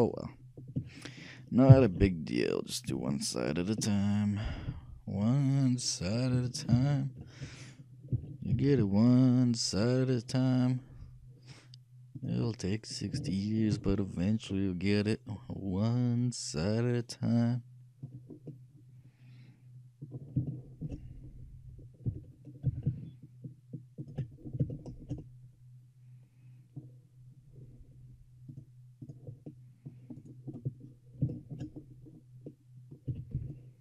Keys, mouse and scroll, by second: 1.8 shift+d, 7.0 ctrl+z, 8.2 g, 12.6-16.4 middle drag, 18.4-20.4 middle drag, 20.7-23.6 shift+middle drag, 22.2 shift+g, 24.5-27.2 shift+middle drag, 27.2-27.5 scroll up 1, 27.5 scroll down 1, 27.8 shift+middle click, 28.6-30.4 drag, 30.3 right click, 31.3 shift+click, 31.5 shift+right click, 31.7 shift+click, 31.7 shift+right click, 31.8-33.8 shift+middle drag, 33.3 shift+a, 33.5 b.